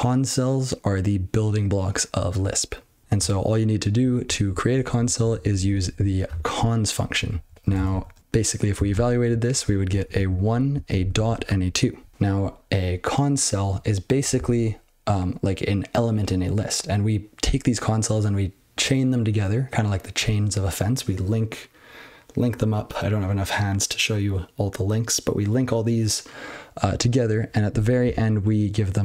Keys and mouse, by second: 4.0 ctrl+n, 4.2 ctrl+n, 4.5 ctrl+n, 4.7 ctrl+n, 4.8 ctrl+n, 5.0 ctrl+n, 5.2 ctrl+n, 5.4 ctrl+n, 5.5 ctrl+n, 5.9 ctrl+e, 7.4 ctrl+n, 7.5 ctrl+n, 7.6 ctrl+a, 7.7 ctrl+space, 7.9 ctrl+n, 8.0 ctrl+w, 8.2 ctrl+p, 8.9 ctrl+c, 9.2 ctrl+n, 9.4 ctrl+n, 9.6 ctrl+f, 9.8 ctrl+f, 9.9 ctrl+n, 10.3 ctrl+f, 10.7 ctrl+f, 10.9 ctrl+f, 11.1 ctrl+f, 11.3 ctrl+f.